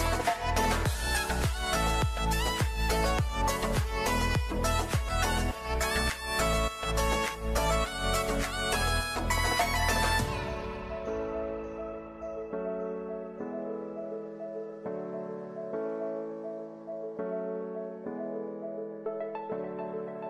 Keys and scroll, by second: 15.4 ctrl+-.